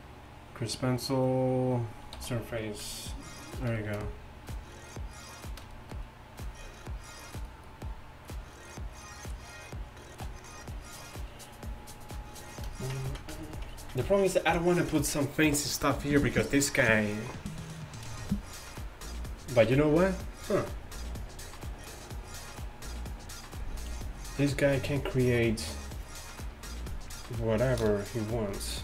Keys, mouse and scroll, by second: 0.3-2.8 drag, 2.2 t, 6.6-10.3 d, 7.2-7.7 drag.